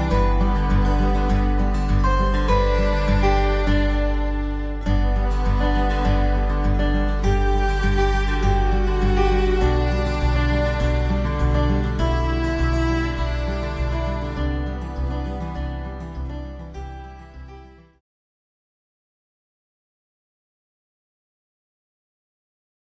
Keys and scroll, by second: 1.9 ctrl+alt+shift+e, 2.3 ctrl+shift+a.